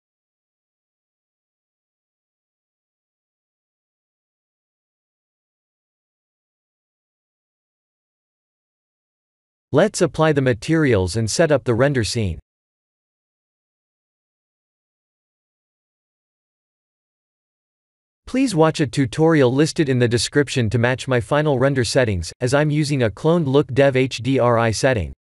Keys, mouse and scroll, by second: 2.2 click, 3.9 click, 6.6 shift+middle click, 8.1 click, 9.5 click, 11.6 click, 12.3 click, 16.0 click, 18.5 click, 19.3 ctrl+s, 21.0 click.